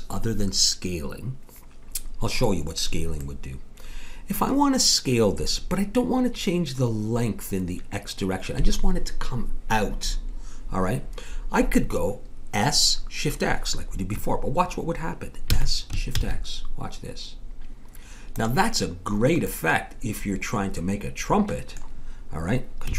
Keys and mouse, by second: 3.2-6.0 middle drag, 15.5 s, 19.5-21.4 middle drag.